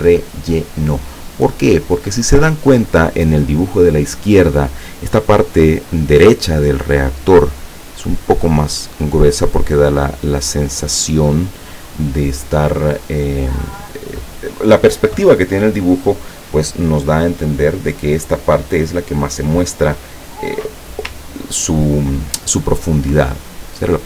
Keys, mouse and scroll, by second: 2.1 click, 7.6-11.5 drag, 21.3 ctrl+scroll up 2, 21.8 ctrl+scroll up 2, 23.0 click.